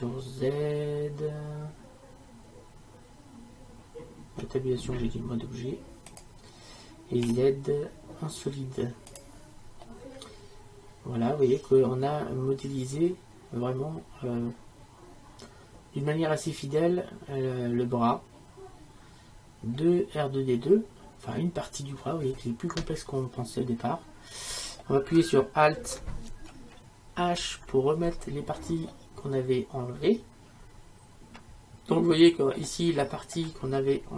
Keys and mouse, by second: 4.5 Tab, 7.3 z, 9.9 middle click, 11.0 middle click, 11.4 middle click, 12.0-13.2 middle drag, 20.7 middle click, 27.3 alt+h, 33.1-34.1 middle drag.